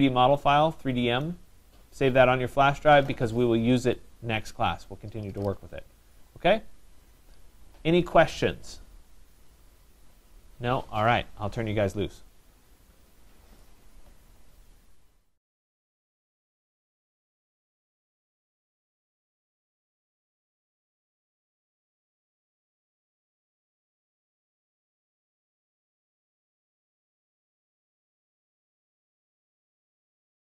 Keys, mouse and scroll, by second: 1.5 click.